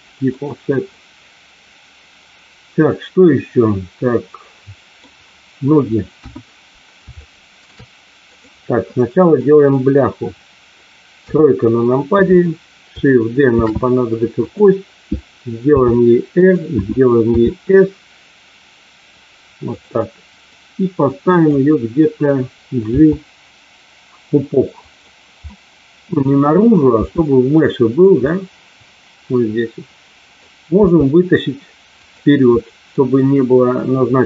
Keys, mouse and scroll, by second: 0.9-4.9 middle drag, 6.1 KP_1, 7.2 shift+middle click, 8.3 click, 9.4 middle click, 11.1 KP_3, 13.4 shift+d, 14.3 click, 15.6 r, 16.3 click, 17.3 s, 19.7 click, 20.3-21.3 drag, 22.9 g, 24.7 click, 25.4 middle click, 26.9 g, 28.2-30.4 middle drag, 30.7 g, 31.9 click, 32.6 middle click.